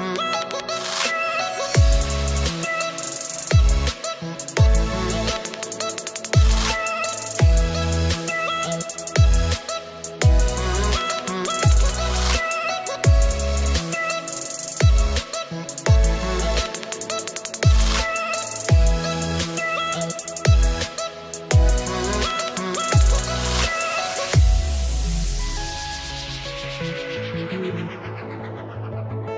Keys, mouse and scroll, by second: 0.0 click, 2.1 click, 4.7 click, 5.3 scroll down 2, 5.9 middle click, 10.6 click, 12.7 click, 22.6 KP_Divide, 24.9 click, 27.8 click.